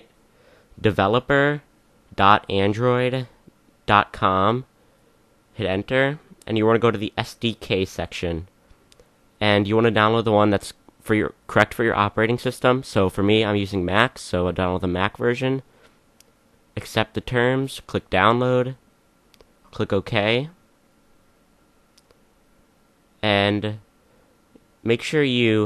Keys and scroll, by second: 0.0-4.9 typing.